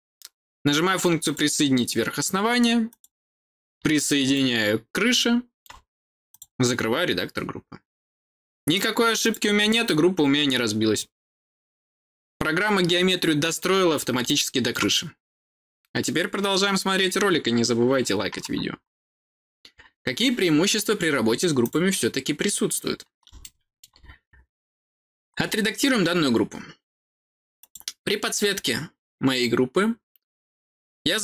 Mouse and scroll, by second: 1.1 click, 2.8 click, 4.2-5.5 middle drag, 6.2 click, 9.1 click, 9.6-13.5 middle drag, 14.1 middle click, 21.5 click, 23.3 middle click, 24.2 scroll up 2, 25.2 scroll down 2, 27.5 click.